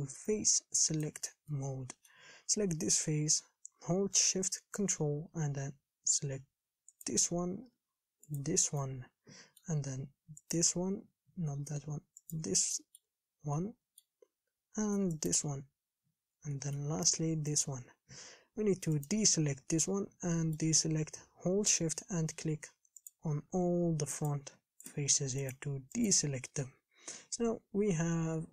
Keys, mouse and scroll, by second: 1.7-7.3 middle drag, 7.3 ctrl+shift+click, 8.6 ctrl+shift+click, 9.0-10.8 middle drag, 10.8 ctrl+shift+click, 11.8 ctrl+z, 12.5 ctrl+shift+Left, 12.9-15.5 middle drag, 15.5 ctrl+shift+Left, 16.8-17.9 middle drag, 17.9 ctrl+shift+Left, 19.3 shift+Left, 19.6-23.3 middle drag, 23.3 shift+click, 24.5 shift+click, 25.1 shift+click, 25.7 shift+click, 26.3 shift+click, 26.7-28.5 middle drag.